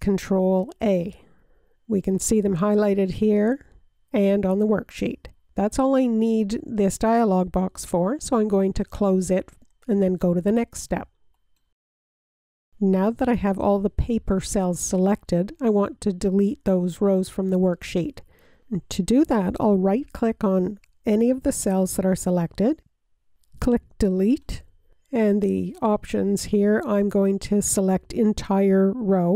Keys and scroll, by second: 1.3 a.